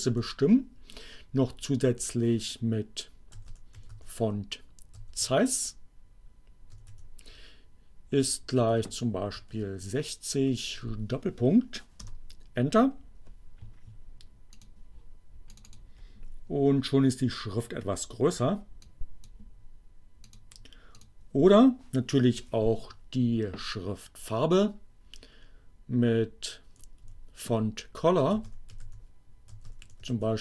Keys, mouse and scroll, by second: 1.7 f, 3.4-5.3 typing, 6.6 z, 7.0 e, 7.6 shift+0, 9.2 shift+6, 9.6 0, 10.1 shift+., 11.9 Return, 14.7 click, 15.5 click, 18.6 click, 20.2 click, 21.1 click, 22.1 Up, 23.0 Left, 27.3-30.4 typing.